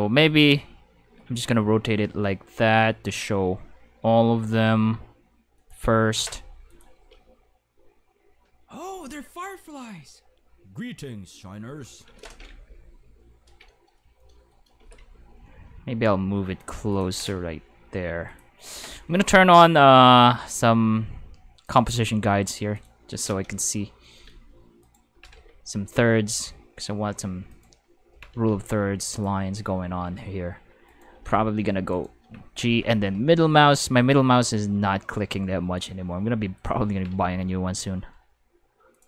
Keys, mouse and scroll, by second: 5.5 click, 6.7 click, 6.9 space, 7.0 5, 12.0 space, 12.2 5, 14.5-15.5 typing, 16.8-17.9 typing, 16.9 click, 18.2 click, 20.5 click, 21.7 click, 22.7 click, 24.1-25.8 typing, 27.5 click, 27.8-28.8 typing, 29.1 click, 30.0 g, 30.9 right click, 31.1-32.8 typing, 31.9 right click, 36.5 click, 36.7-37.6 typing, 38.9 click.